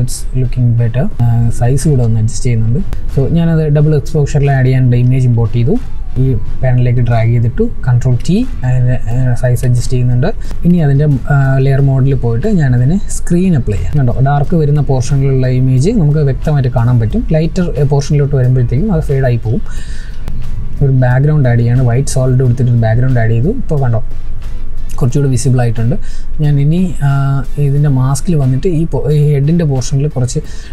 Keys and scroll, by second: 7.8 ctrl+t.